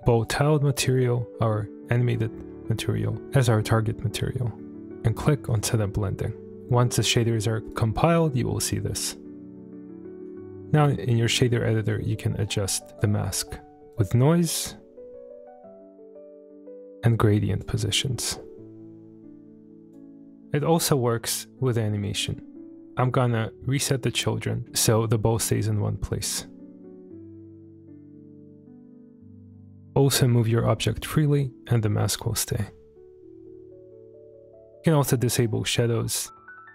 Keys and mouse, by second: 2.1-2.5 middle drag, 5.5-6.5 drag, 7.6 click, 8.5-9.8 middle drag, 10.6 click, 11.9-13.1 drag, 13.9-17.6 drag, 18.0-20.0 drag, 22.0 click, 23.8 click, 24.7 middle click, 25.5 space, 29.8 space, 29.8 g.